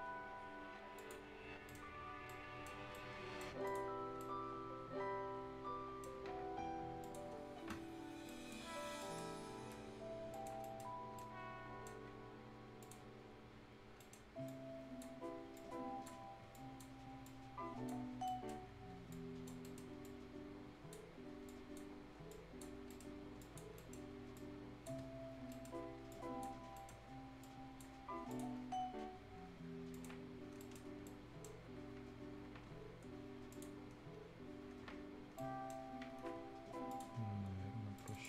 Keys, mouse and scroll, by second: 1.3 scroll down 1, 1.6 right click, 1.7 Tab, 1.9 scroll up 1, 2.2 right click, 2.7 scroll down 1, 2.9 right click, 4.0 scroll down 1, 4.2-7.0 right drag, 7.0 click, 7.3 scroll down 1, 8.0 scroll up 1, 8.2 right click, 8.8 scroll down 1, 9.0 right click, 9.3 scroll up 1, 10.3 click, 10.9 scroll up 1, 11.1-12.8 right drag, 12.8 click, 13.1 scroll down 1, 13.3-13.6 scroll up 1, 13.9 right click, 14.4-16.2 drag, 16.2 scroll up 1, 16.5 click, 18.0 scroll down 1, 18.2 right click, 18.6-19.1 scroll up 1, 19.1 click, 19.6 right click, 20.0 click, 21.1-21.4 scroll up 1, 21.4 click, 22.7 scroll down 1, 22.8 right click, 23.1 scroll up 1, 23.4 click, 23.7 right click, 24.3 right click, 24.6 click, 25.0 scroll down 1, 25.5 right click, 25.7 scroll up 1, 26.1 click, 26.1 click, 26.6 scroll down 1, 26.7 right click, 27.4 click, 27.9-28.3 scroll down 1, 28.3 click, 28.9-29.3 scroll up 1, 29.9 click, 30.2 scroll down 1, 30.5 right click, 30.5-31.0 scroll up 2, 30.6 right click, 31.0 right click, 31.7 scroll up 1, 33.5 click, 35.1 scroll up 1, 35.3-36.9 right drag, 36.9 click.